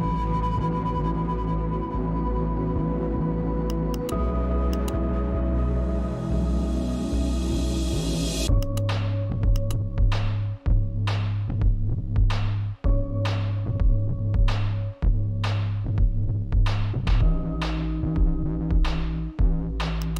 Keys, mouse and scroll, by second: 2.8-6.8 drag, 8.3-12.3 drag, 18.0-19.9 typing.